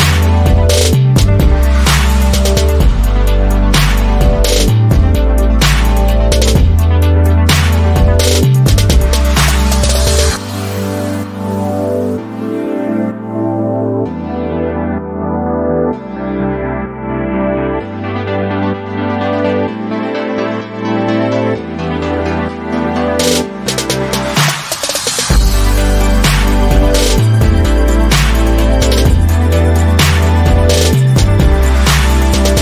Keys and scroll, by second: 3.3 Up.